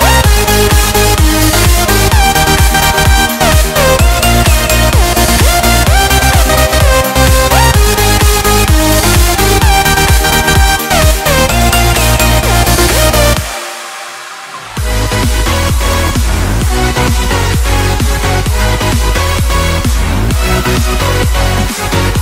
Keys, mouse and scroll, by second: 0.6 click, 2.1 click, 7.0 click, 9.8 click, 11.3 ctrl+middle click.